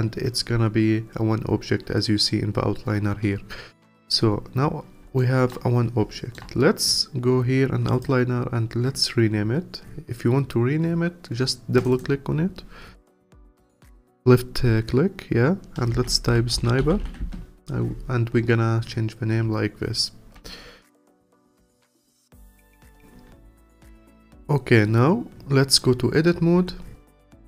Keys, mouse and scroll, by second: 4.6-5.2 scroll up 1, 5.2 alt+middle click, 5.7 scroll up 1, 6.1-7.9 alt+middle drag, 7.9 click, 11.8 click, 11.9-15.1 drag, 20.4 alt+click, 21.4 alt+click, 22.1 scroll up 2, 22.6 click, 23.4 alt+click, 23.9-25.2 scroll down 3, 25.2-26.6 scroll up 1, 26.6 Tab.